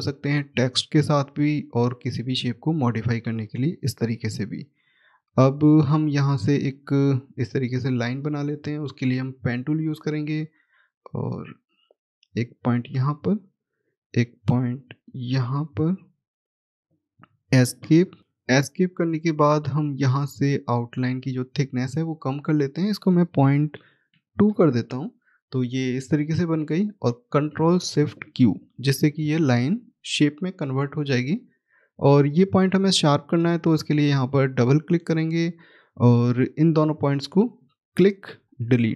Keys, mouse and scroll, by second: 3.3-4.1 scroll down 1, 4.7 middle click, 5.1-8.1 scroll down 1, 9.9 click, 11.3-12.3 scroll up 1, 12.3 click, 12.8-13.5 scroll down 1, 13.5-14.6 scroll up 1, 14.6 click, 22.3 click, 23.6 ., 26.3 middle click, 28.5 ctrl+shift+q, 30.6 click, 31.5-33.6 scroll up 1, 33.6 click, 33.8 double click, 37.3 click, 38.5 Delete.